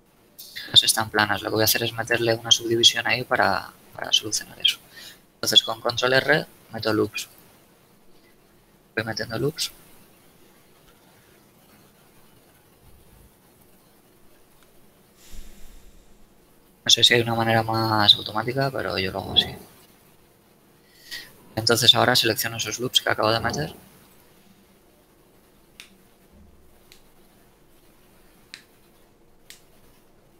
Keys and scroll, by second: 3.3 z, 6.2 ctrl+r, 7.9 a, 9.9 ctrl+a, 11.5 ctrl+r, 11.9 ctrl+a, 13.5 ctrl+r, 14.2 ctrl+a, 15.5 ctrl+r, 16.0 ctrl+a, 17.5 ctrl+r, 18.2 ctrl+a, 19.6 ctrl+r, 20.3 ctrl+a.